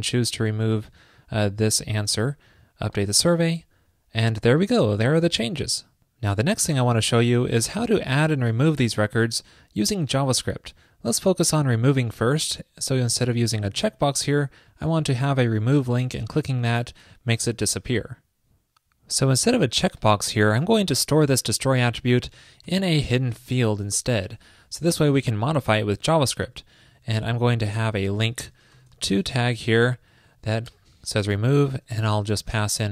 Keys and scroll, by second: 26.2 alt+Left, 26.9 alt+shift+Left, 29.9 alt+shift+Right, 31.5 super+Right.